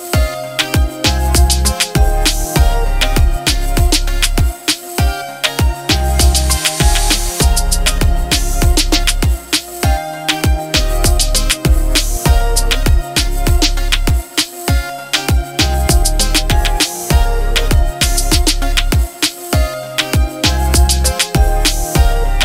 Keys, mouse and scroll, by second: 1.2 Up, 2.6 Left, 3.6 Right, 4.0 Left, 6.6 click, 8.6 h, 11.4 click, 12.8 Up, 14.0 Left, 16.4 Right, 18.3 Right, 18.5-20.2 alt+click, 19.2 click, 19.9 alt+click, 20.3-22.1 drag.